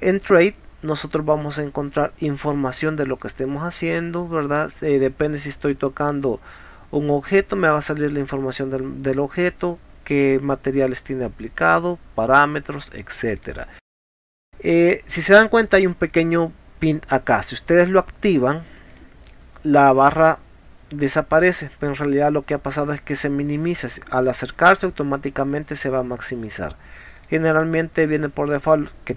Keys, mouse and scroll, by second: 1.4 click, 3.2 click, 6.1 click, 11.7 click, 12.8 click, 13.4 click, 17.8 click, 18.9 click, 27.2 click.